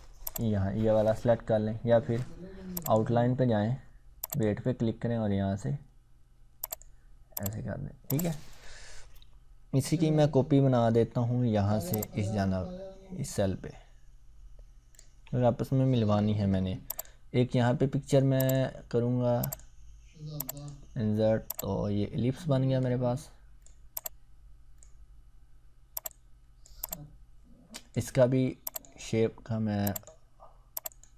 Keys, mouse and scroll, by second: 2.8 click, 6.6 click, 10.3 scroll down 1, 11.9-15.1 ctrl+drag.